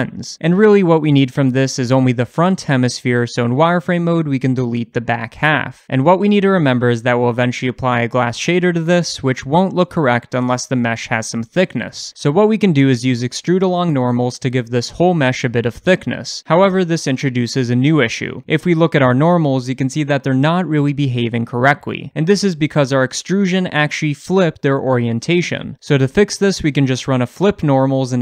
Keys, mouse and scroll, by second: 1.2 click, 1.6-1.9 scroll down 2, 1.9-4.7 shift+middle drag, 2.6 Tab, 4.7 click, 5.3 x, 7.0-8.9 middle drag, 8.9-10.2 drag, 9.3 Tab, 10.7 h, 11.2 click, 11.3 h, 11.5 click, 11.7 Tab, 12.1 scroll up 1, 12.1-14.6 shift+middle drag, 12.6 a, 14.6 click, 16.4 a, 16.8-17.9 shift+middle drag, 21.2-28.2 drag, 22.8-26.3 scroll up 1, 28.1 Return.